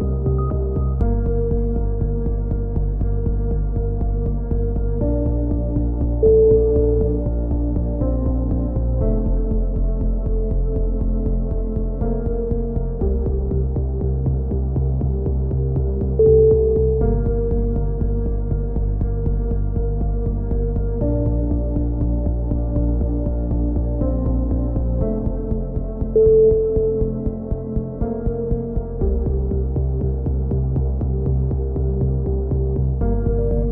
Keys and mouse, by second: 0.0-1.1 middle drag, 11.8 right click, 12.5 click, 14.2 click, 15.5-17.2 middle drag, 17.2 click, 18.0-23.3 middle drag, 24.2 middle click, 25.5-27.2 right drag, 29.5 click, 33.0 right click.